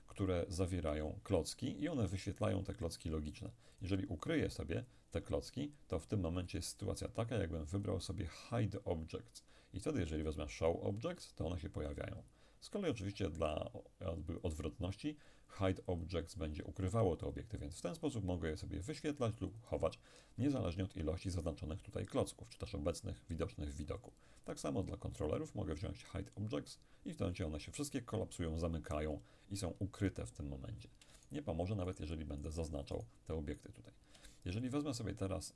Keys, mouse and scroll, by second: 3.8-5.9 drag, 7.8 click, 11.3 click, 12.9 click, 16.0 click, 17.3-20.6 drag, 24.1 click, 26.4 click, 31.3-34.7 shift+right drag, 34.7 shift+click.